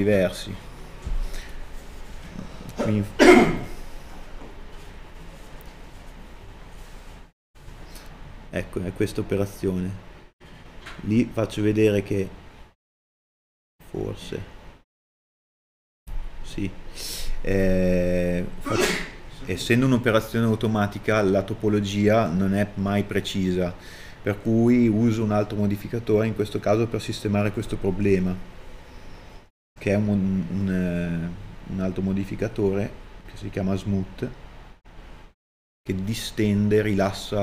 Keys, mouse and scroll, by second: 10.8 middle click, 11.4 scroll up 1.